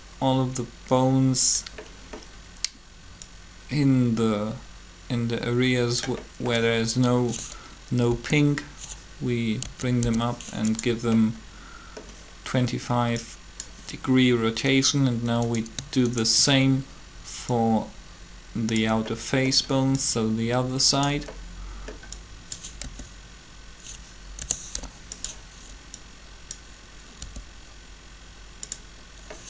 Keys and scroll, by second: 8.1 r, 9.6-10.0 typing, 22.8 r, 24.5 typing, 27.2 r.